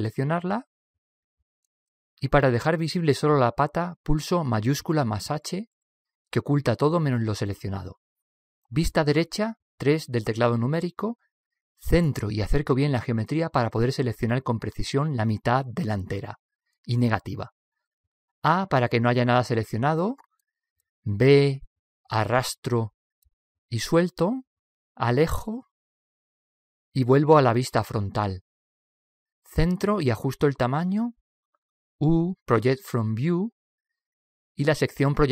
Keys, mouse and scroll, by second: 0.4 l, 4.3 shift+h, 5.8 shift+h, 10.3 KP_3, 14.0-15.9 middle drag, 15.7-16.7 scroll up 1, 16.7-18.6 middle drag, 18.3 KP_1, 19.3 KP_3, 19.3 a, 20.9 a, 22.8 b, 26.8-29.5 middle drag, 28.8 KP_1, 29.8-30.8 middle drag, 31.2 middle click, 33.0 u, 33.3 u.